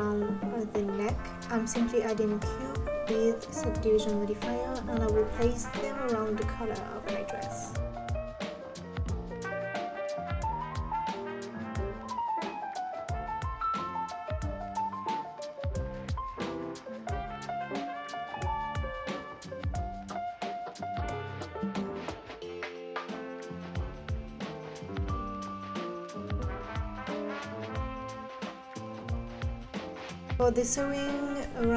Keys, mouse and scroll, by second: 0.7 Tab, 1.1 g, 1.4 Tab, 1.5 click, 1.8 Tab, 2.0 Tab, 2.3 scroll up 2, 2.4-9.9 typing, 3.2 Tab, 3.5 click, 4.7 click, 5.8 click, 6.2 scroll down 3, 6.3 click, 6.5 scroll up 6, 7.3 click, 7.7-8.2 scroll up 3, 7.9 click, 8.2 scroll down 3, 8.5 click, 9.3 ctrl+z, 9.4 click, 9.8 click, 10.1 scroll down 2, 10.3-10.8 drag, 10.9 drag, 11.3 scroll up 5, 11.4 Tab, 11.5 click, 11.7 shift+click, 12.0-16.2 typing, 12.3 Tab, 12.4 click, 13.3 click, 13.5 shift+click, 15.0 middle click, 15.5 middle click, 16.0 click, 16.4 shift+click, 17.3 g, 17.6 click, 17.7 scroll down 2, 17.8 scroll up 2, 17.9 click, 18.1 Tab, 18.2 Tab, 18.4 g, 18.9 scroll down 1, 19.0 click, 19.3 g, 19.6 click, 19.7 middle click, 20.3-20.9 scroll up 2, 20.9 ctrl+Left, 21.0 click, 21.3 click, 21.5-25.1 typing, 21.5 middle click, 22.2 middle click, 22.5 middle click, 22.7 alt+click, 22.8 middle click, 23.5 middle click, 23.8 middle click, 24.3 middle click, 24.5 scroll down 3, 24.8 middle click, 25.2 scroll up 2, 25.6 scroll down 2, 25.7 click, 26.2 click, 26.3 middle click, 26.7-27.7 typing, 27.1 middle click, 27.9 scroll up 2, 28.1 click, 28.2 Left, 28.3 Left, 28.4 Left, 28.8 g, 29.3 Tab, 29.5 click, 29.6-29.9 scroll down 10, 29.9 scroll up 2, 30.1 click.